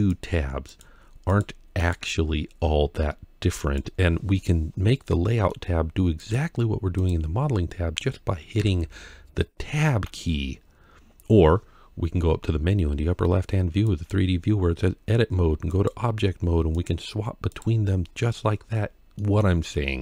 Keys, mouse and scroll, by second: 0.0 click, 0.0-0.5 scroll down 1, 1.1 click, 3.4 click, 4.4-4.9 scroll down 1, 4.9 middle click, 6.8 middle click, 6.8 click, 6.8-7.4 scroll down 1, 8.4 Tab, 10.5 scroll up 2, 13.7-15.7 drag, 16.5-17.5 drag, 18.4-19.0 scroll down 2, 19.0 middle click, 19.0 scroll down 1.